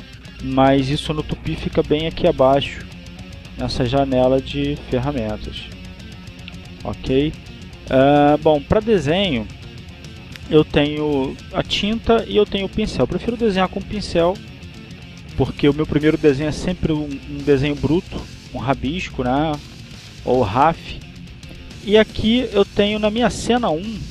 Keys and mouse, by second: 0.4 click, 1.5 click, 4.0 click, 4.9 click, 5.6 click, 6.6 click, 10.0 click, 19.7 click.